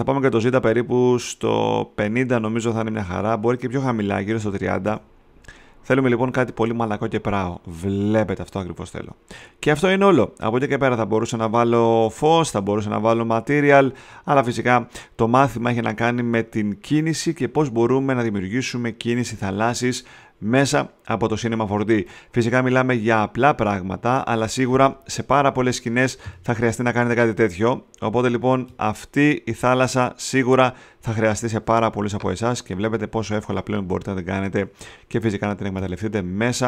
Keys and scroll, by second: 4.1-5.0 typing.